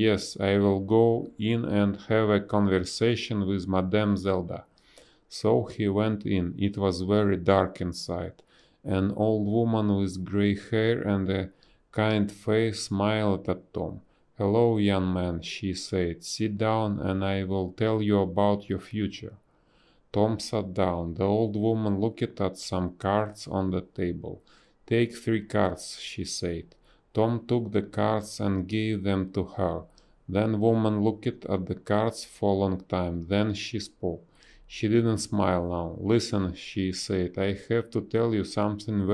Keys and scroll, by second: 2.8 space, 4.6 ctrl+z, 8.0 space, 12.4 space, 12.9 space, 15.6 b, 16.3 space, 17.9 a, 26.8 space, 27.1 b, 29.3 space, 31.3 ctrl+z, 33.7 z, 34.4 b, 36.0 ctrl+z, 37.7 space.